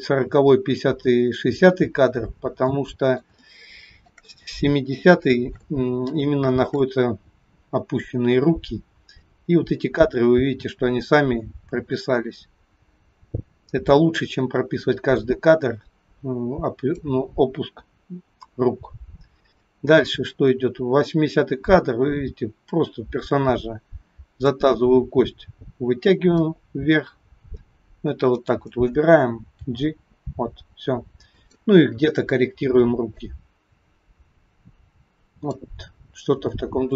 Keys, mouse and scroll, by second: 2.8 middle click, 3.5 shift+middle click, 5.8-6.2 scroll up 4, 6.3 shift+middle click, 9.4 click, 19.7 click, 26.2 click, 28.5 click, 29.7 g, 33.2 click, 36.1 scroll down 4, 36.6 shift+middle click.